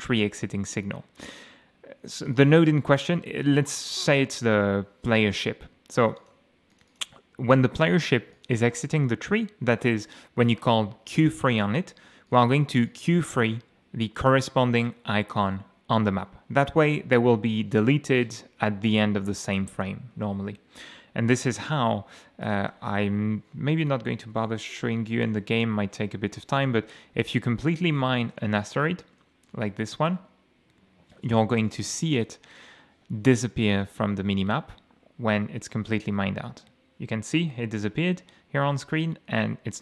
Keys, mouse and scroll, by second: 2.2 click, 6.0 click, 6.7 click, 8.3 click, 12.3 click, 12.9 click, 22.4 click, 22.7 F6, 23.6-25.4 typing, 26.7 m, 27.3 d, 28.4 e, 28.8 a, 29.3 w, 29.6 e, 31.9 m, 37.9 m.